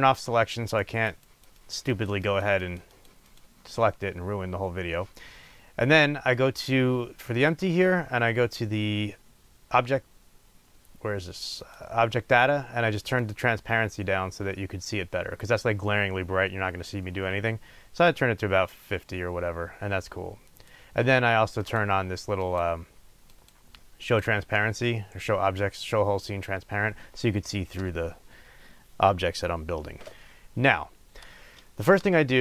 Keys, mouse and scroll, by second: 0.7 click, 1.1 click, 1.2 click, 2.3 click, 2.6 click, 7.3 click, 11.5 click, 13.1-21.7 drag, 22.4 click, 23.2 click, 24.0 click.